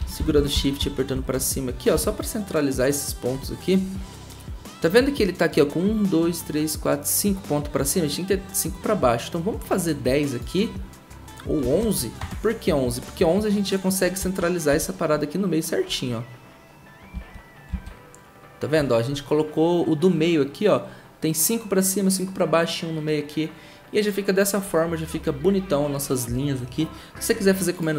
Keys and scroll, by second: 0.0 shift+Up, 0.2 shift+Up, 0.3 shift+Up, 0.5 shift+Up, 0.8 shift+Up, 1.1 shift+Up, 1.3 shift+Up, 1.9 shift+Down, 11.6 typing, 12.2 Return, 14.2 shift+Up, 14.7 shift+Up, 17.1 Down, 17.7 Down.